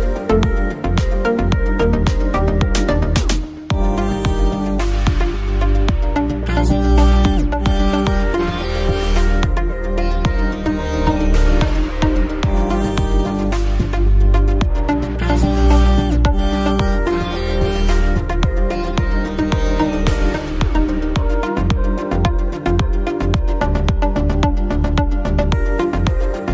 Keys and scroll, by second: 4.0-8.6 typing, 11.9 ctrl+t.